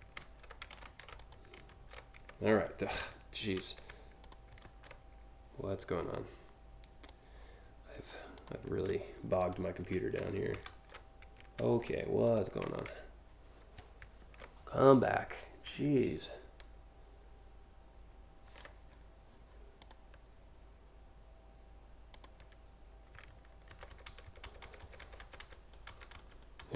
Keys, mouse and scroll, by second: 0.8 click, 1.5 ctrl+alt+z, 1.8 ctrl+alt+z, 3.2 ctrl+z, 3.8 click, 4.3 ctrl+z, 6.7-7.7 drag, 8.0 click, 8.6 ctrl+z, 9.1 click, 9.6 ctrl+z, 10.3 ctrl+alt+z, 11.2 ctrl+z, 11.9 click, 12.3 ctrl+z, 13.8 ctrl+z, 19.4 click, 24.5 ctrl+shift+z, 25.6 ctrl+shift+z.